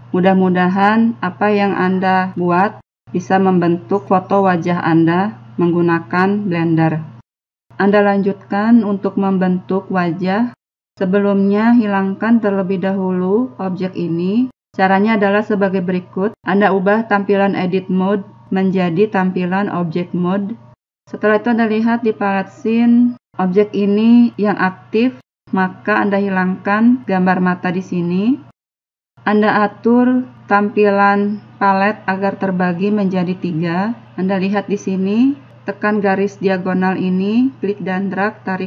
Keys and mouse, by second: 20.7-22.6 drag, 28.6-30.6 drag, 32.0-33.0 drag, 33.1 click.